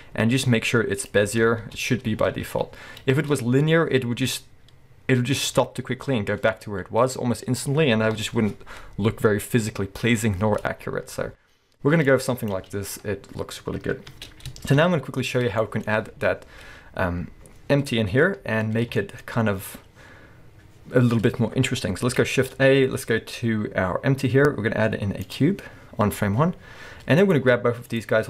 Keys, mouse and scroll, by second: 1.6 space, 3.1 space, 8.2 KP_1, 10.7-11.4 scroll down 1, 12.1-15.6 drag, 12.6 space, 14.1 space, 14.7 shift+Left, 15.6-27.2 shift+middle drag, 15.9-16.4 scroll up 1, 18.0-18.5 scroll down 2, 18.5 scroll down 1, 22.4 shift+a, 25.6-26.0 scroll down 1, 26.5-27.2 scroll up 1, 27.2 click, 27.9 shift+click.